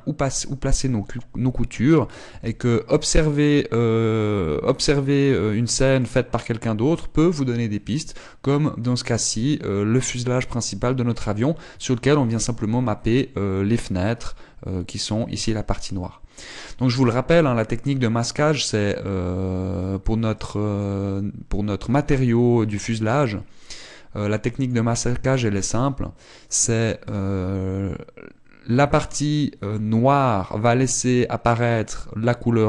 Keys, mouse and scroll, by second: 0.0-0.4 scroll up 2, 2.8 z, 3.6 middle click, 4.7 middle click, 6.9-7.9 scroll down 1, 7.9 scroll up 1, 20.9 click, 24.1 click.